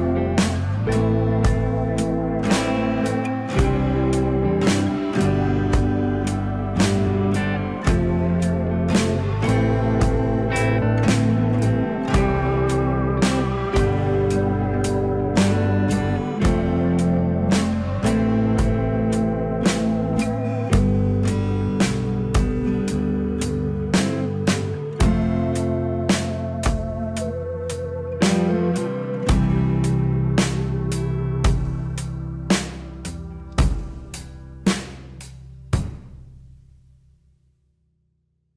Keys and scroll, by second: 5.3 alt+w, 17.6 alt+w.